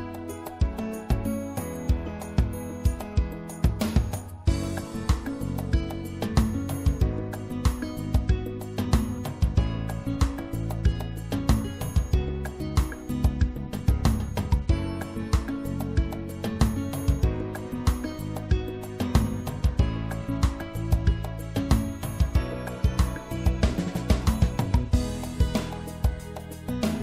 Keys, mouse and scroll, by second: 3.1-5.0 drag, 5.3 e, 6.5-8.2 drag, 9.5 s, 13.0-14.9 drag, 15.7-17.6 drag, 18.1-19.9 drag, 20.2 click, 21.1-26.4 middle drag.